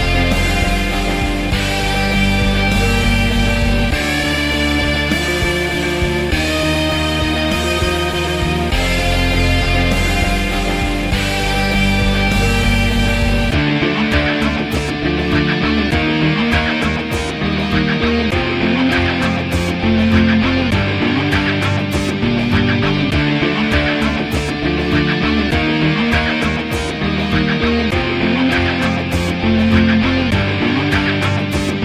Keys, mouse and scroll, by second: 0.1 alt+middle click, 0.2 alt+click, 0.4 alt+middle click, 0.7-5.3 drag, 5.3 alt+middle click, 5.4 alt+right click, 5.6-8.0 drag, 8.0 ctrl+z, 8.3 alt+shift+click, 8.6 f, 8.8-10.0 drag, 10.0 alt+middle click, 10.1-11.5 alt+drag, 11.5 alt+middle click, 11.8-12.9 drag, 12.9 alt+middle click, 13.1-14.2 alt+drag, 14.2 alt+right click, 14.3 alt+click, 14.4 alt+middle click, 14.5-17.1 alt+drag, 17.1 alt+middle click, 17.3-19.4 drag, 19.4 alt+middle click, 19.6 alt+click, 20.4 alt+right click, 20.4 alt+middle click, 20.6-23.3 drag, 23.3 f, 23.5 click, 23.8 f, 23.9 click, 24.3 p, 24.5 middle click, 24.6 alt+click, 24.7 alt+middle click, 25.0-26.2 drag, 26.2 alt+middle click, 26.3 alt+shift+click, 26.8 alt+middle click, 26.9 alt+click, 27.1 alt+middle click, 27.2 alt+click, 27.6 alt+right click, 27.7 alt+middle click, 27.8 alt+click, 28.7 alt+middle click, 28.9-30.7 drag, 30.7 alt+right click, 30.9-31.8 drag.